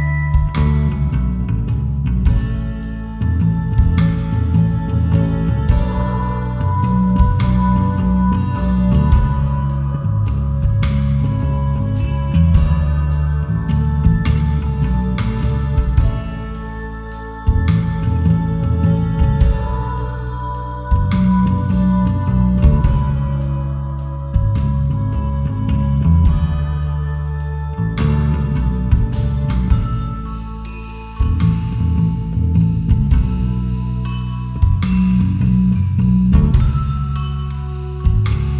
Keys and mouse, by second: 0.0 y, 0.3 KP_0, 0.6 KP_Enter, 1.5 Tab, 2.1 KP_1, 3.0 Tab, 3.7 click, 4.5 r, 7.1 click, 7.4-7.8 drag, 7.8 Tab, 8.5 Tab, 8.9 click, 9.5 r, 11.1 click, 11.5 g, 12.9 click, 13.3 click, 13.5 click, 14.5 r, 15.2 click, 15.7 click, 17.6 drag, 17.9 g, 19.1 click, 19.3 Tab, 19.8 Tab, 20.5 r, 21.5 click, 22.7 click, 23.7 r, 24.5 click, 25.0 click, 26.8 click, 26.8 r, 27.5 g, 28.9 click, 29.7 s, 30.4 click, 30.9 g, 31.6 click, 32.8 r, 34.1 click, 36.1 g, 36.8 click, 37.8 g, 38.2 click.